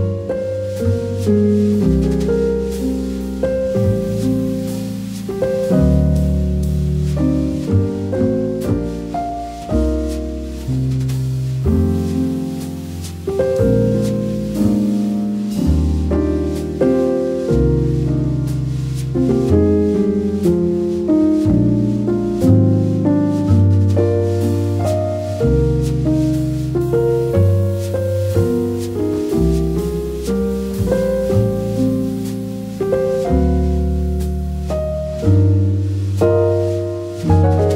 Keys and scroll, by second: 2.3 n, 4.0 e, 8.2 n, 13.0 super+z, 16.2 e, 17.7 n, 20.1 v, 30.0 p, 35.0 v.